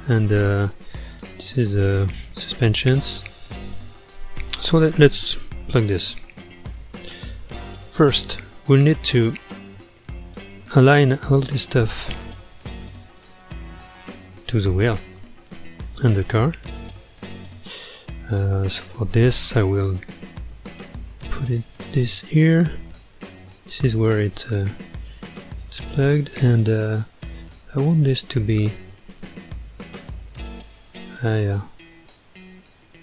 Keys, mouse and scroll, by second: 1.1 drag, 1.6 g, 3.1-6.2 middle drag, 6.8 KP_Divide, 8.6-9.7 middle drag, 9.7 click, 10.2-11.8 middle drag, 11.8 shift+click, 12.5 shift+click, 13.0 shift+click, 14.0 shift+click, 14.8 shift+click, 15.6 shift+click, 17.2 shift+click, 18.1-19.6 middle drag, 19.6 KP_1, 20.0 ctrl+KP_3, 21.6 g, 25.7-28.6 middle drag, 30.4 click.